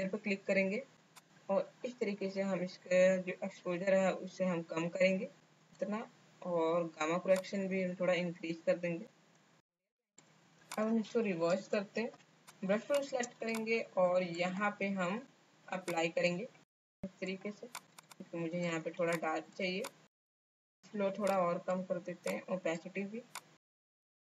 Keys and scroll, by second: 10.1 space, 11.4 ctrl+i, 12.7 space, 13.3 alt+space, 18.9 space, 23.7 space, 24.0 space.